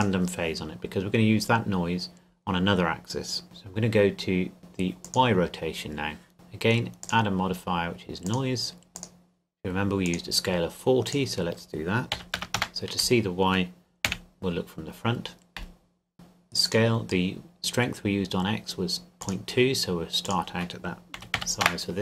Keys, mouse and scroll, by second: 5.0 click, 7.0 click, 9.0 click, 12.2 KP_4, 12.4 KP_0, 12.6 KP_Enter, 14.1 KP_1, 16.6 click, 19.2 click, 21.2 KP_Decimal, 21.4 KP_2, 21.6 KP_Enter.